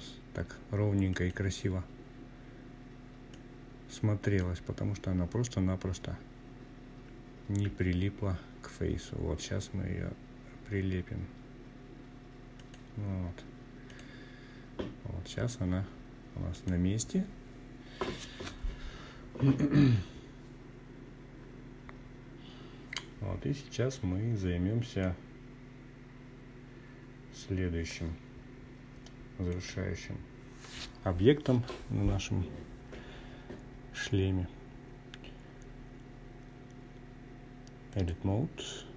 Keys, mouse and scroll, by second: 1.3-2.6 drag, 5.6 g, 10.5 click, 11.8 click, 14.5 click, 23.0-26.0 drag, 27.4-36.1 drag.